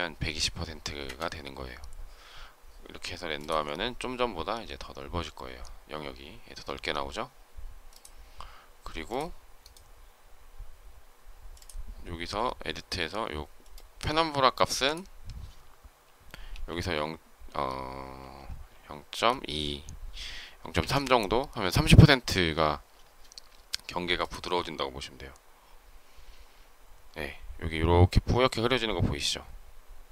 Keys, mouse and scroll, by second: 0.9 Return, 20.8 Return.